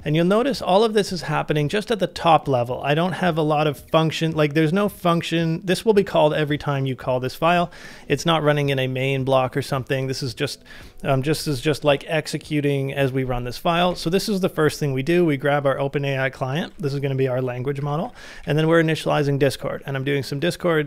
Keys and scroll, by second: 11.4 j, 13.9 shift+v, 16.7 ctrl+c, 17.5-20.1 typing.